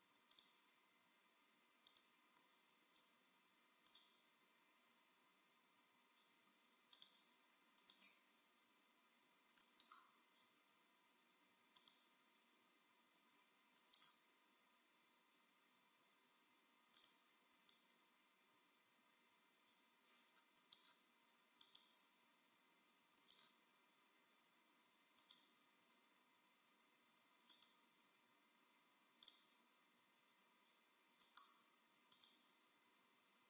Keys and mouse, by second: 1.9-3.6 drag, 3.3 ctrl+r, 7.1-8.8 drag, 7.7-8.8 right drag, 8.8 e, 8.9 right click, 11.9-13.7 drag, 12.6 e, 17.0-18.6 drag, 17.4-19.2 right drag, 18.6 e, 21.7-23.2 drag, 22.2 e, 25.3-26.9 drag, 26.4 e, 27.5-29.1 right drag, 29.2-30.8 right drag, 30.1 e, 30.8 middle click, 32.2-33.4 drag.